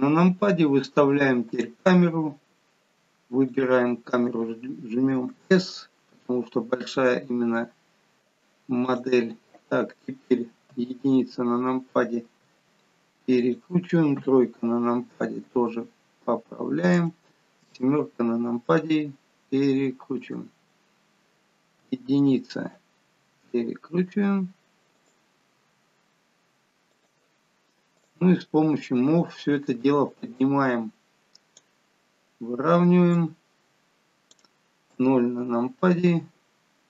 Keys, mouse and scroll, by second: 1.5 click, 3.5 click, 5.4 s, 10.8 KP_1, 12.4 r, 14.2 KP_3, 15.5 r, 17.6 KP_7, 18.9 r, 21.8 KP_1, 23.2 r, 25.6 r, 28.0 click, 28.4-30.0 scroll down 7, 30.0 click, 33.2 click, 34.9 KP_0.